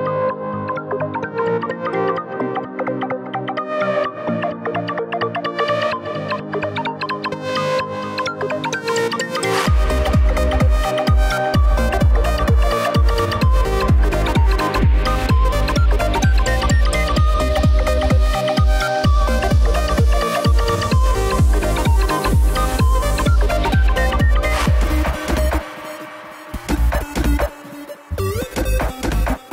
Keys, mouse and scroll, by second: 4.0 click, 5.5 click, 6.4 KP_7, 8.1 z, 9.2-9.6 scroll down 1, 9.6-11.1 shift+middle drag, 11.1 shift+d, 12.5 r, 15.1 g, 17.4 r, 20.0 g, 22.9 shift+d, 25.2 r, 28.2 g.